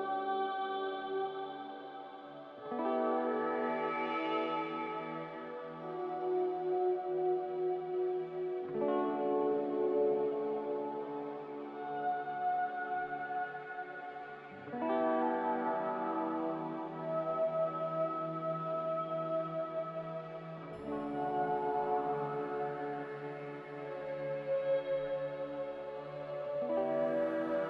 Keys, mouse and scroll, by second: 0.5 click, 3.9 q, 9.2 s, 10.6-16.7 typing, 13.6 Caps_Lock, 18.3 f, 23.0 a, 25.8 n.